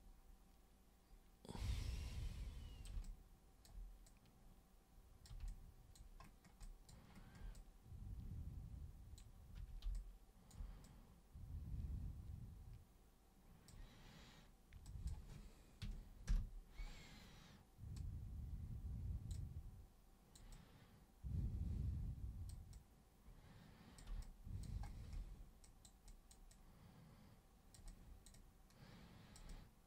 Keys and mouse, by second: 3.1 alt+super+click, 4.1-5.3 super+drag, 5.5 alt+super+click, 6.6 alt+super+click, 7.5-9.2 super+drag, 9.6 super+1, 10.0 alt+super+click, 10.9-13.7 super+drag, 14.9 super+click, 16.3 super+Return, 18.0-19.3 super+drag, 20.6-22.5 super+drag, 22.8-24.0 super+drag, 24.2 alt+super+click, 25.6 super+click, 26.1 super+click, 26.5-27.8 super+drag, 27.9 super+click, 29.5-29.8 super+drag.